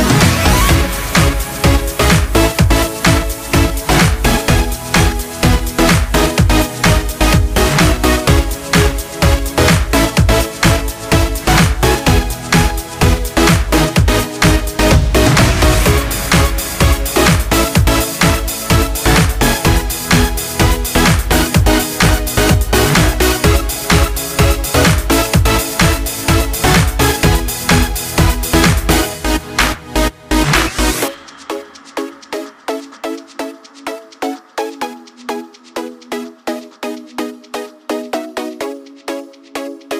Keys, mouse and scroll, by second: 3.7-15.8 drag, 15.9-25.5 drag, 28.5 click, 30.9 right click, 30.9 right click, 32.7 click, 35.1 click, 39.8 click.